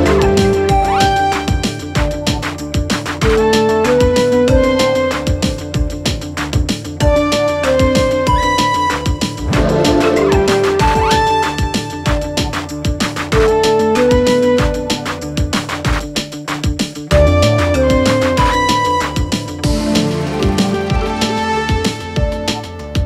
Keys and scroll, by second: 2.8 ], 3.2 Delete, 3.7 4, 5.8 2, 7.7 Escape, 13.8 Escape.